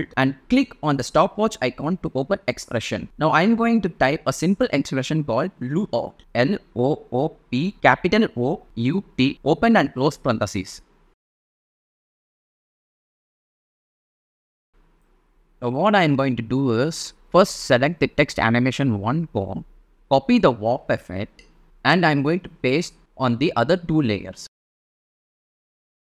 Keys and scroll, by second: 3.6-8.4 typing, 8.8 shift+super+0, 9.0 shift+super+a, 9.5 super+c, 12.2 space, 17.5 space, 21.7 super+c.